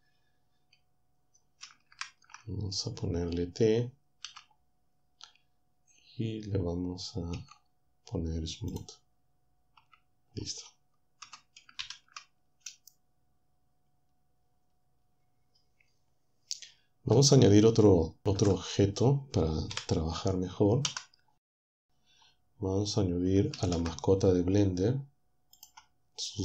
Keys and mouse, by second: 1.9 ctrl+Up, 4.3 t, 7.4 Tab, 11.8 ctrl+Down, 18.6 ctrl+Up, 20.2 KP_7, 21.4 z, 23.6 ctrl+shift+a, 25.6 click.